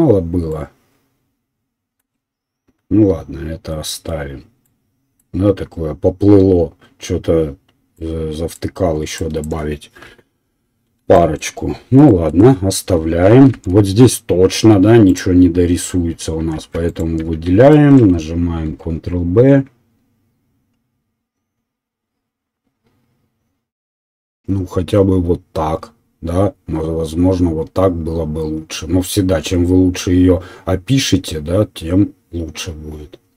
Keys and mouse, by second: 10.0 KP_1, 13.5 shift+z, 15.1 alt+right click, 15.2-16.8 alt+middle drag, 16.6 2, 16.8 right click, 17.0-33.3 middle drag, 18.6 ctrl+b.